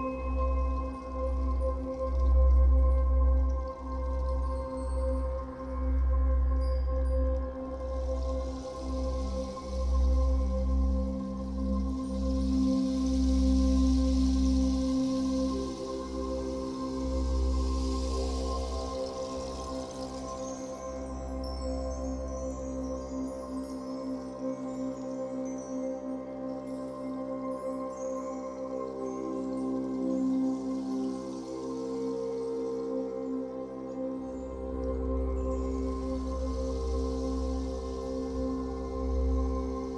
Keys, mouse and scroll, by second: 0.3 f, 1.0-2.3 drag, 2.3-5.0 middle drag, 3.4-4.4 scroll up 2, 4.4 f, 5.1-7.0 drag, 6.7 scroll down 2, 7.0-11.8 shift+middle drag, 7.5-7.9 scroll up 2, 10.6 scroll up 2, 11.8-13.8 drag, 13.3-13.8 scroll down 2, 13.8-18.1 middle drag, 15.2-15.5 scroll up 2, 18.1-19.3 drag, 19.0 f, 19.4-22.2 shift+drag, 21.7-22.2 scroll down 1, 22.2-31.4 middle drag, 23.6 scroll down 1, 24.0-24.4 scroll up 1, 27.1-27.7 scroll up 1, 29.8 scroll up 1, 30.6 f, 31.4 click, 32.5-35.6 drag, 35.0 f, 35.8-39.9 drag.